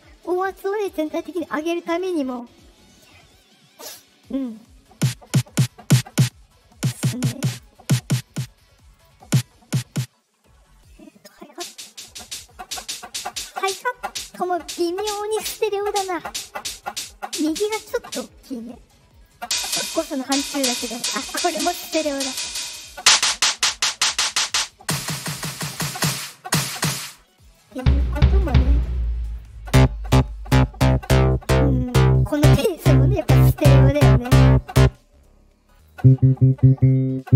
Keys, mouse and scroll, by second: 7.4 click, 8.2 click, 8.9 click, 11.2 click, 19.0 click, 22.6 click, 24.4 click, 27.3 click, 29.1 click, 35.6 click.